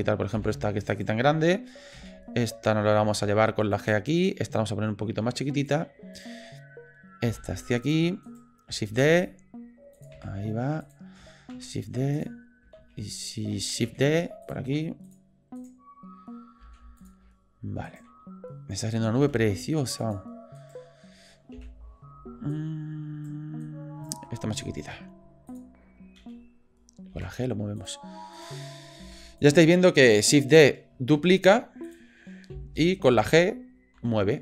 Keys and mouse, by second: 0.3 Delete, 0.9 click, 1.9 d, 3.0 g, 4.2 click, 5.3 s, 6.1 click, 7.2 g, 8.3 click, 9.0 shift+d, 10.1 s, 11.5 shift+d, 12.8 shift+s, 13.9 shift+d, 14.7 s, 15.6 click, 16.6 g, 17.9 click, 19.2 g, 20.6 click, 21.5 Delete, 22.5 click, 23.6 click, 24.9 s, 26.2 f, 27.1 g, 28.3 click, 29.0 g, 31.1 shift+d, 32.5 Delete, 33.1 click, 34.0 g.